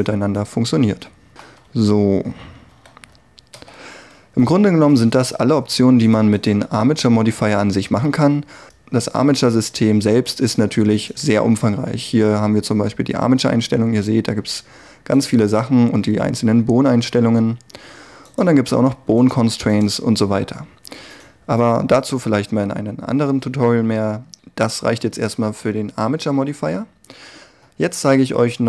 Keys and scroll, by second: 2.8 a, 3.6 alt+r.